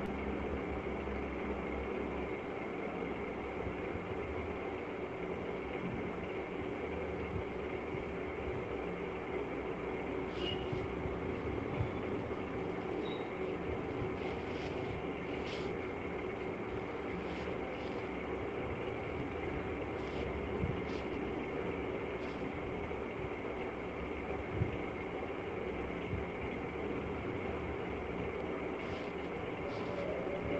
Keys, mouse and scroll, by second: 2.5 click, 3.9 click, 5.8 click, 6.6 click, 8.0 click, 9.2 click, 10.4 click, 11.9 right click, 12.8 shift+click, 13.8 alt+click, 14.6 right click, 17.2 click, 19.0 click, 21.0 click, 22.3 right click, 23.8 click, 24.7 click, 24.9 click, 25.7 click, 26.6 click, 27.0 click, 27.2 click, 27.8 click, 28.2 click, 28.6 click, 29.0 click.